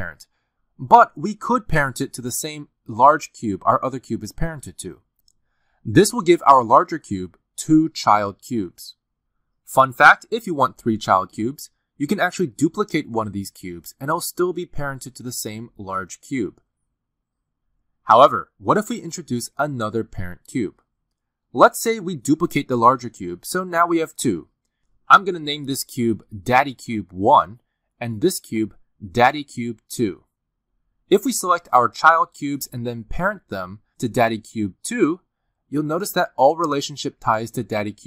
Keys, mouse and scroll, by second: 2.9 shift+click, 5.0 right click, 8.9-9.8 scroll down 2, 9.8 click, 9.8-10.3 scroll down 2, 10.3 click, 11.5 click, 11.8 r, 13.8 click, 15.0 shift+d, 17.3-18.1 scroll down 3, 18.1-19.2 scroll down 1, 19.2 click, 19.6 click, 19.9 r, 23.7 shift+d, 26.1 click, 26.9 click, 28.1 d, 30.3 click, 31.8 click, 32.2 d, 34.4 click, 34.8 shift+click, 37.0 right click.